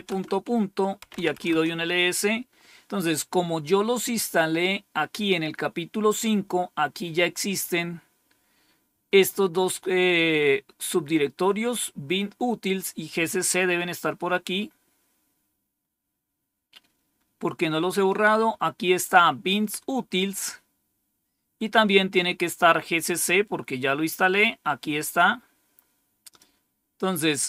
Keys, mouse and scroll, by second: 0.0-1.6 typing, 18.0-19.0 drag, 25.0-26.3 drag, 27.3-27.4 scroll down 1.